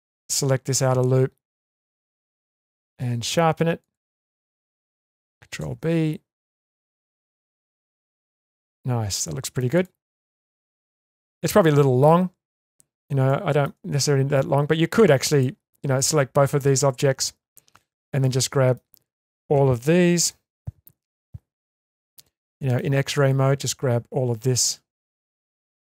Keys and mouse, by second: 0.2 click, 2.2-2.9 middle drag, 3.8 shift+click, 4.2-4.7 middle drag, 5.6 ctrl+b, 8.3 Tab, 9.2-9.6 middle drag, 10.1-12.0 middle drag, 12.6-13.0 shift+middle drag, 13.2 middle click, 13.7 Tab, 14.5 Tab, 15.9 shift+click, 16.4 Tab, 17.2 Tab, 18.3 shift+middle click, 20.6 1, 21.8 alt+z, 22.2 middle click, 23.4-25.0 drag.